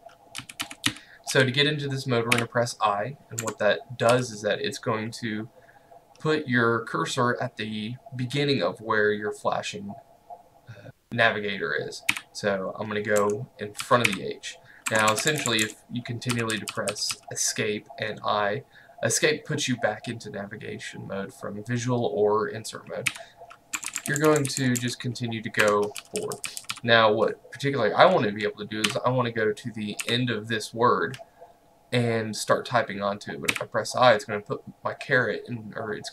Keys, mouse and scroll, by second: 0.2-2.9 typing, 3.4 Escape, 4.2 l, 12.2 i, 13.3 Escape, 13.8-17.2 typing, 23.8 Escape, 24.0 i, 24.0 Escape, 24.3 i, 24.4 Escape, 24.5 i, 24.6 Escape, 24.8 i, 25.7 Escape, 26.0-26.8 typing, 28.9-30.6 typing, 33.6 i.